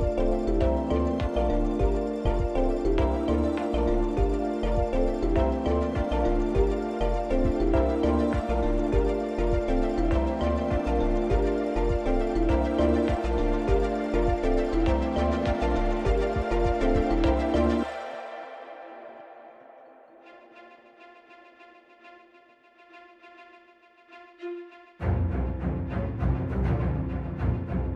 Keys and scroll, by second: 5.6 i.